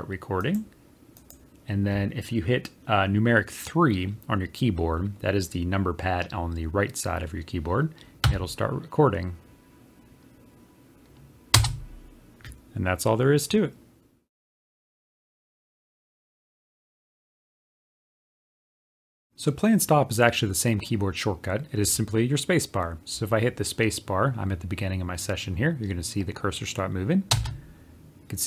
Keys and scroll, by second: 19.3 space.